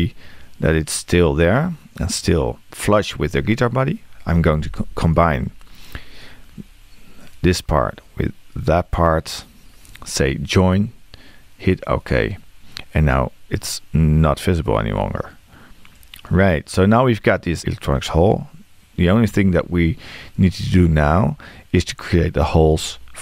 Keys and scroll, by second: 22.6 c.